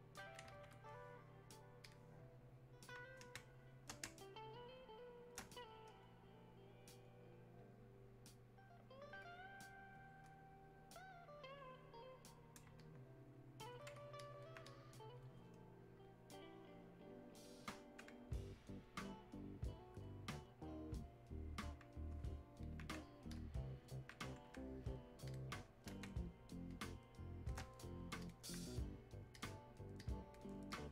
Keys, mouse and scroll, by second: 3.4 space, 4.8 click, 4.9 space, 6.1-11.5 drag, 11.5 click, 12.8-14.2 shift+drag, 14.2 alt+click, 14.8-18.9 drag, 19.2-23.4 drag, 23.9 alt+click, 26.1 space, 26.7 click, 26.8 space, 28.3-30.9 drag.